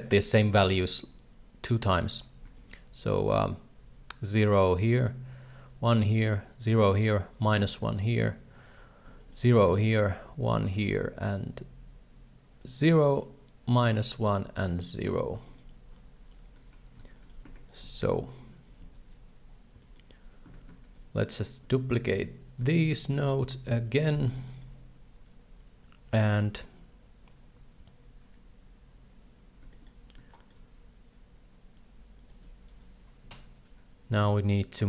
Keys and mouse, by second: 0.2 shift+middle click, 1.8 click, 2.6 shift+middle click, 5.6 click, 6.3 click, 7.3 click, 7.6 click, 8.5 click, 9.2 shift+middle click, 10.3 click, 11.5-13.0 drag, 13.6 click, 13.9 click, 14.7 click, 15.4 shift+middle click, 17.1 shift+middle click, 17.5 alt+a, 17.7 right click, 17.8 g, 18.8 b, 19.7 g, 20.5 alt+a, 21.3 right click, 23.8 shift+right click, 24.0 shift+middle click, 24.4 shift+d, 26.1-27.3 drag, 28.2-29.3 drag, 29.7 shift+middle drag, 30.3 shift+middle click, 31.2-32.5 shift+drag, 32.7 click, 34.6-34.8 shift+drag.